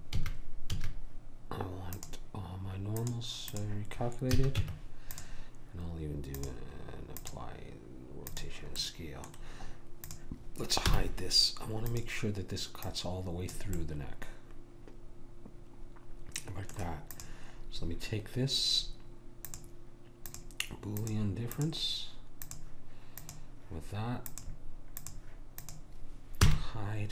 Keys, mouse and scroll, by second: 0.2 a, 0.8 a, 3.6 click, 4.4 a, 4.6 Tab, 8.8-10.9 middle drag, 10.1-14.8 drag, 10.9 h, 13.8 middle click, 14.9 middle click, 17.2 click, 26.5 h.